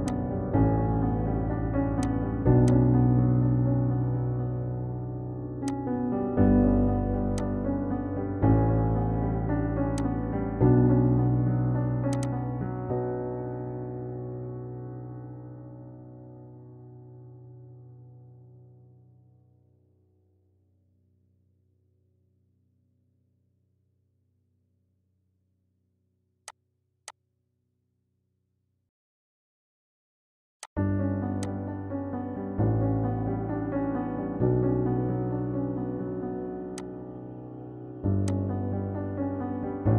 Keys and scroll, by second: 14.2 l, 14.8 d, 15.0 a, 15.4 t, 16.2 Return.